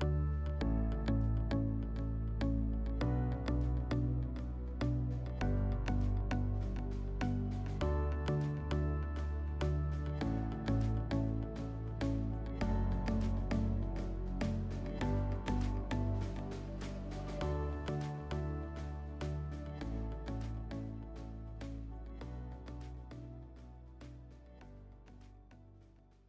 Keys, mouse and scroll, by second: 1.1 scroll, 1.8 scroll, 3.4 middle click, 9.3-11.1 middle drag.